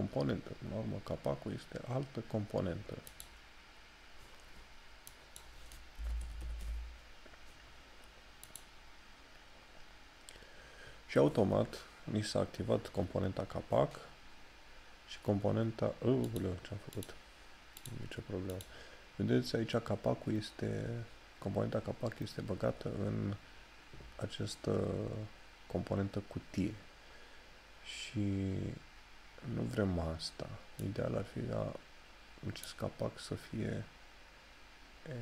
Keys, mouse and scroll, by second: 16.4 click, 31.0 click.